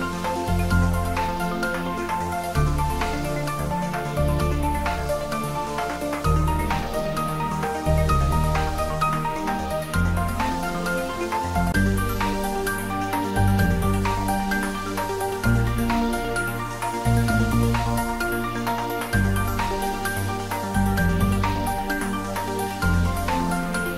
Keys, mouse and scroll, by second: 0.3 click, 3.4 shift+right click, 5.4 click, 7.3 shift+right click, 8.2 shift+a, 9.8 click, 11.3 s, 14.1 click, 15.5 g, 16.8 click, 17.1 s, 17.5 y, 18.0 x, 19.4 click, 20.0 scroll down 1, 20.5-22.1 middle drag, 22.9 click, 23.4-23.9 scroll up 1.